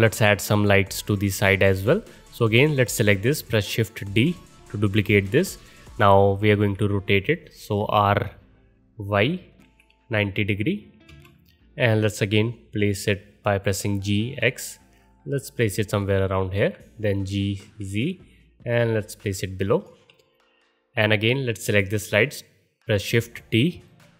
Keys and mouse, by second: 0.8-2.4 middle drag, 4.1 shift+d, 6.5 r, 12.7 g, 17.0 g, 22.9 shift+d.